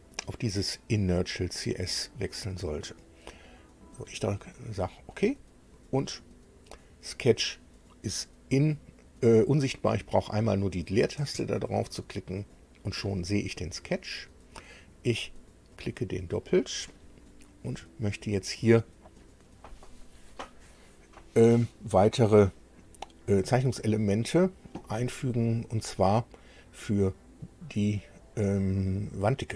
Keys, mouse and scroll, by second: 0.1 click, 1.9 click, 5.1 click, 7.1 click, 11.2 space, 15.7 click, 17.4 scroll down 1, 18.0-23.4 shift+middle drag, 27.4 click.